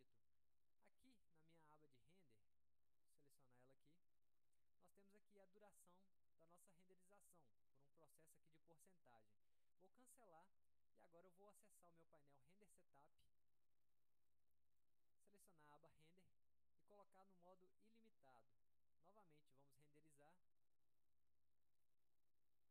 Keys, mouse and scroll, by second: 8.3 click, 12.0-12.6 drag, 13.3 click, 14.5 click, 16.1 click, 17.7 click, 20.1 click.